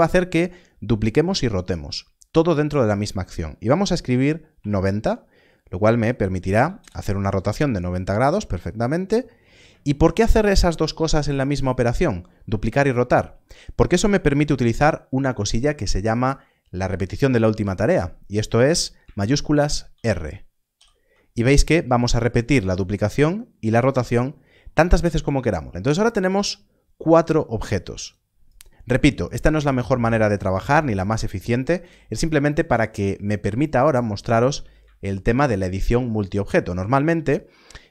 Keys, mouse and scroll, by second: 4.5 r, 4.6 9, 6.7 9, 8.7-9.6 scroll down 1, 20.7 shift+r, 28.0 click, 33.4 shift+click, 36.1-37.9 scroll up 1.